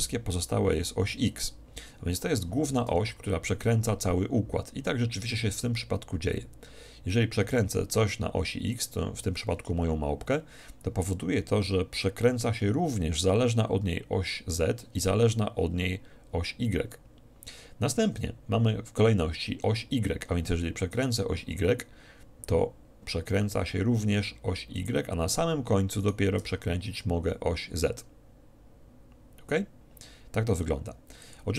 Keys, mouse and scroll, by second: 3.1 r, 9.0-10.6 drag, 21.0-22.9 right drag, 21.7 r, 24.9-26.9 drag, 26.1-28.1 right drag, 26.5 r, 28.1-29.1 middle drag.